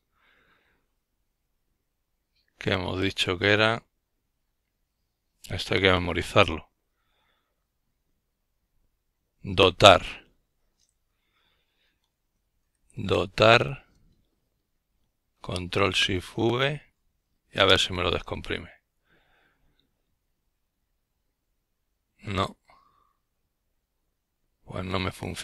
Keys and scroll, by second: 2.8-4.7 typing, 6.7 ctrl+v, 8.5 Return, 17.9-19.6 typing, 21.7 ctrl+v, 22.7 Return.